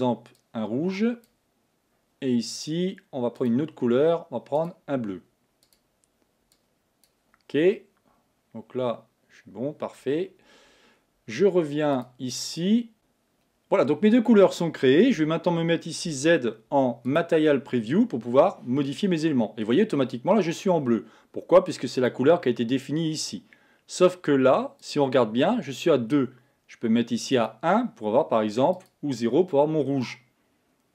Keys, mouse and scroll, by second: 3.5-5.0 drag, 5.7 click, 12.1 click, 12.9 click, 15.2 a, 16.1 z, 19.1-22.1 middle drag, 22.1 click, 24.8 click, 27.4-29.9 drag.